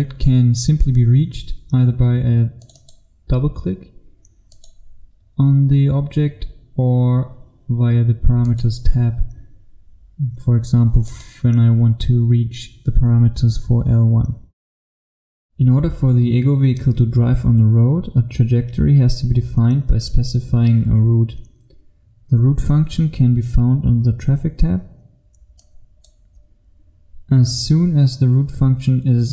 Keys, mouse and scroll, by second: 15.7 F1, 25.7 click, 29.1-29.3 scroll up 1.